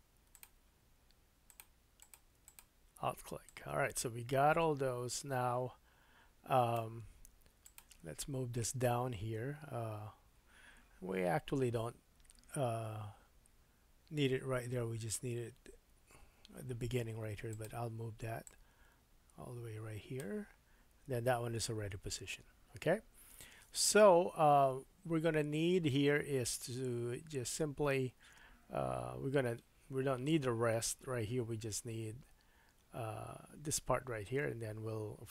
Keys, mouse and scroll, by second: 1.5 click, 2.0 click, 2.4 alt+click, 3.4-7.8 drag, 17.5 alt+click, 18.4-35.3 drag.